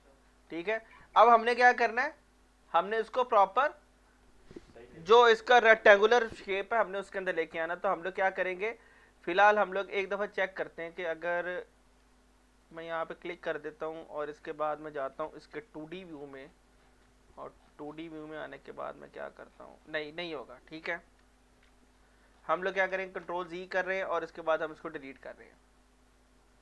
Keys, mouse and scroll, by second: 0.5 scroll up 1, 0.5 scroll down 2, 0.9 scroll up 1, 1.6-3.2 alt+drag, 3.2 scroll up 1, 3.5 scroll down 1, 9.7 alt+Num_Lock, 9.7 scroll down 1, 9.9-11.4 alt+drag, 11.4 ctrl+scroll up 1, 12.6 click, 15.5 F1, 16.1 scroll down 1, 16.6 scroll up 1, 17.1 alt+middle click, 17.6 scroll down 1, 19.8 scroll up 1, 21.2 F2, 22.0 scroll up 1, 22.3 scroll down 1, 23.1 ctrl+z, 24.5 click.